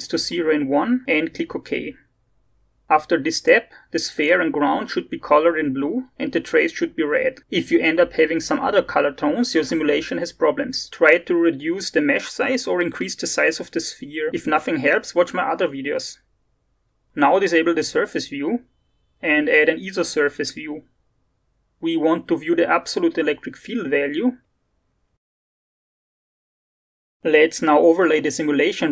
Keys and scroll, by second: 0.7 0.